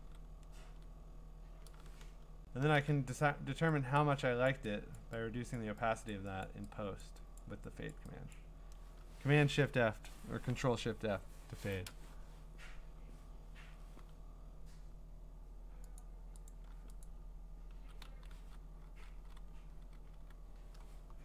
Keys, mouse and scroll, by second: 2.3 click, 2.6 ctrl+shift+f, 4.0 click, 4.5 click, 4.9 click, 5.5 click, 6.1 click, 6.4 click, 7.0 click, 7.4 click, 7.9 click, 8.3 click, 13.5 Return, 16.0 click, 16.5 click, 17.0 click, 17.8-20.2 typing, 21.1-21.2 scroll.